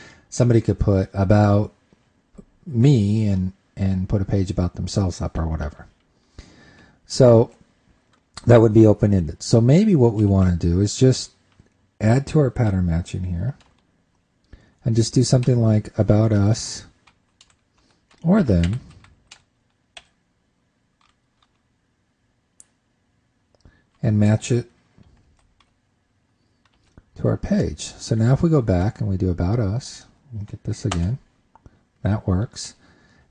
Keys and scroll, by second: 25.7 super+s, 27.2 super+Tab.